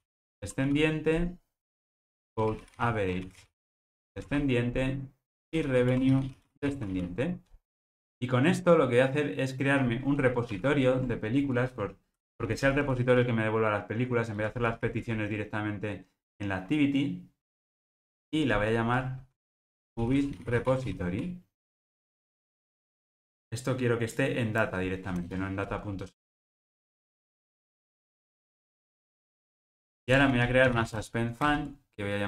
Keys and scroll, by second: 10.4 super+n, 26.2 alt+Return, 28.5 alt+Return, 31.5 Return.